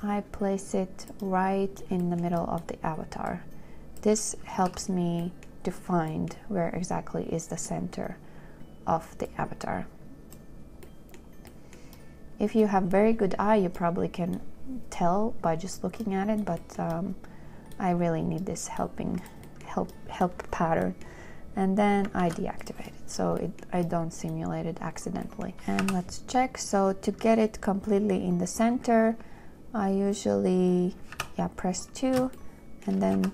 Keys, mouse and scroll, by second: 4.9 2, 22.5 ctrl+j, 26.1 2, 31.4 2, 32.7 shift+click.